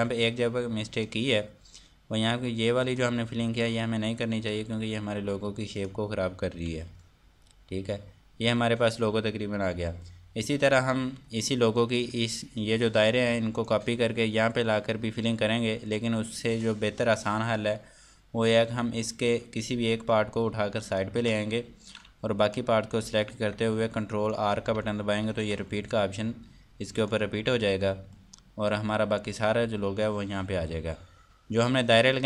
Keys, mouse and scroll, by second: 3.9 scroll up 1, 5.1 Delete, 6.3 click, 7.2 Delete, 8.2 scroll down 1, 12.9 click, 17.1 click, 23.0 click, 23.8 alt+click, 27.6 click, 28.3 F2, 28.7 click.